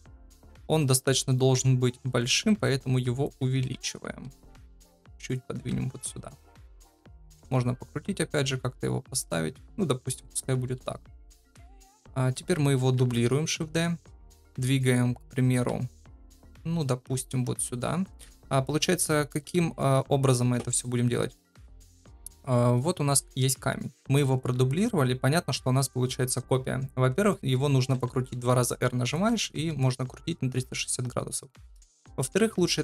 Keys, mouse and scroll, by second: 2.1 s, 3.7 KP_7, 4.4 g, 5.6 KP_0, 7.0 r, 8.6 r, 10.6 KP_7, 12.9 shift+d, 17.1 g, 27.9 r, 29.3 ctrl+z.